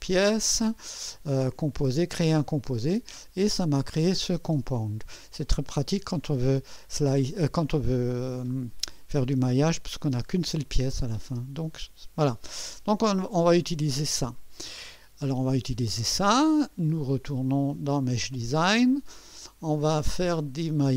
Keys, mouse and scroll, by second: 0.0 click, 2.9 click, 3.6 scroll down 2, 5.4 click, 9.6 space, 10.9 space, 16.9 click, 17.9 click.